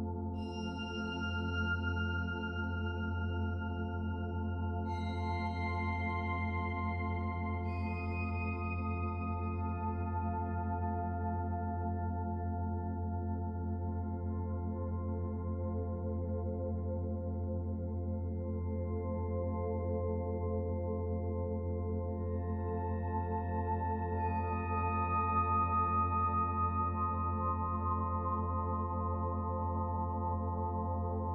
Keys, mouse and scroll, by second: 3.2 middle click, 4.9 middle click, 5.5-6.4 scroll down 2, 5.8 middle click, 6.4 middle click, 9.2 shift+a, 11.6 s, 16.4 middle click, 18.2 KP_1, 19.6 click, 20.2 shift+click, 20.8 shift+click, 21.7 click, 26.0 click, 26.6 click, 30.9 middle click.